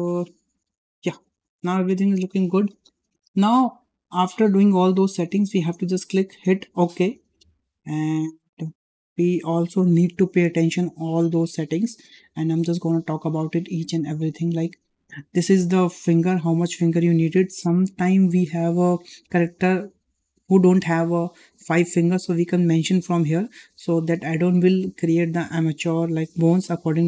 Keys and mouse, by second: 0.5 g, 1.4 shift+middle drag, 2.9 shift+middle click, 6.5 click, 8.5-9.1 shift+middle drag, 20.5-20.8 middle drag.